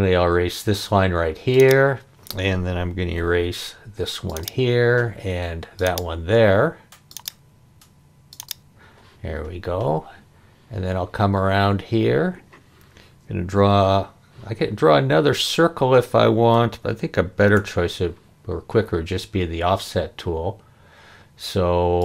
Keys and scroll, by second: 3.1 e, 13.6 c, 17.6 f.